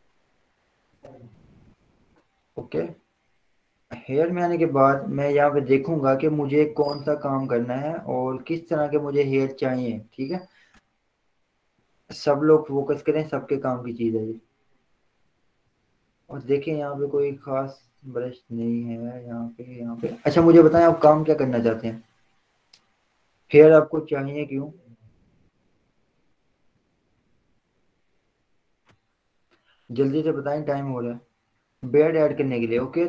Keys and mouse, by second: 9.0-12.3 drag, 12.3-21.2 drag, 25.2 click.